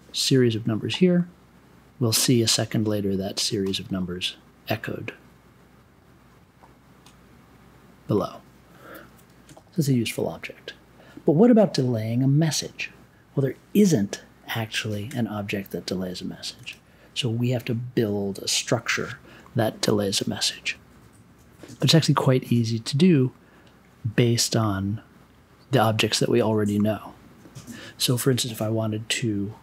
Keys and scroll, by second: 14.9 super+j, 16.5 super+y.